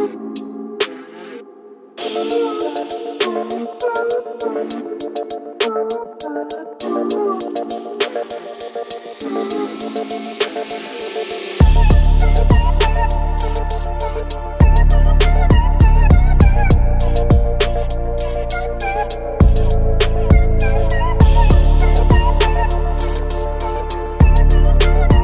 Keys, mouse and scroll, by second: 0.0-1.3 middle drag, 3.6 shift+click, 4.5-5.5 middle drag, 6.5 shift+click, 7.1 shift+click, 8.0 shift+click, 8.7 shift+click, 9.3 shift+click, 10.4-13.4 middle drag, 14.8 shift+click, 15.9 shift+click, 16.6-18.4 middle drag, 20.0 i, 20.2 i.